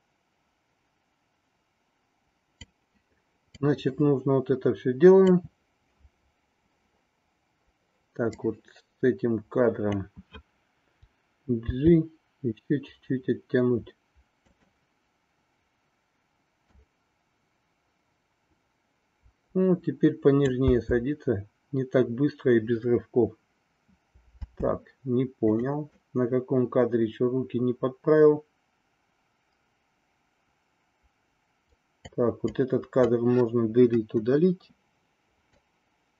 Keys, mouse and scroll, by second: 3.5-5.3 drag, 8.3-9.8 drag, 11.7 g, 16.7-20.6 drag, 20.7 space, 24.6 space, 25.6 click, 25.9-32.2 drag, 32.4 click, 33.9 Delete, 35.5-36.1 drag.